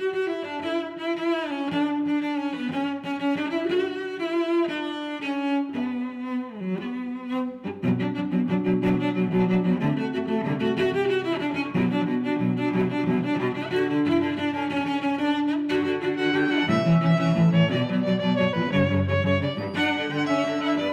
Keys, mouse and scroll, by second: 0.2 click, 1.0 middle click, 1.6 click, 2.5 click, 3.1 click, 3.5 click, 4.6 click, 13.4 Tab, 15.1 click, 16.2 click, 16.5 click, 19.0 click.